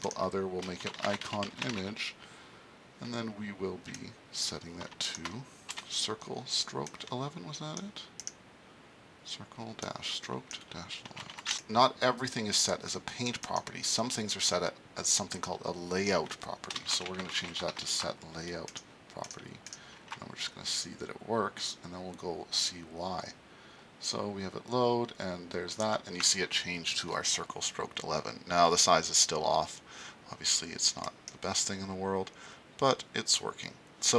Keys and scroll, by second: 0.6-2.2 typing, 5.7 ', 10.8-11.7 typing, 16.7-18.0 typing.